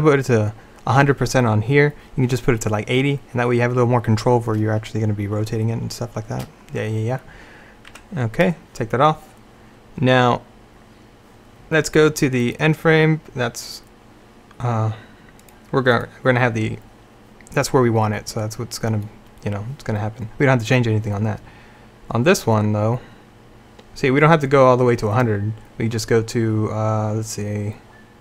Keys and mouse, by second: 8.0 Tab.